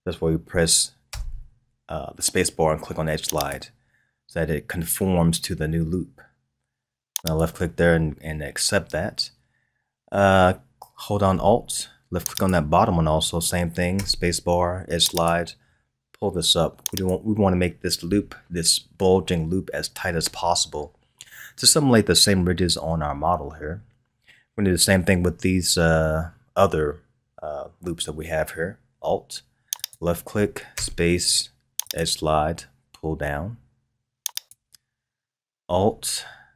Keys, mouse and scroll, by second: 1.1 space, 12.3 alt+click, 13.9 space, 29.7 alt+click, 30.7 space.